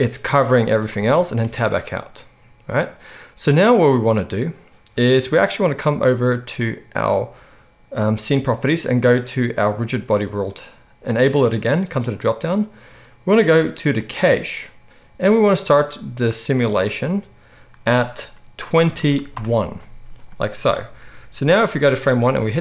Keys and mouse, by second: 0.5 z, 1.4 Tab, 11.1-22.6 drag, 22.5 space.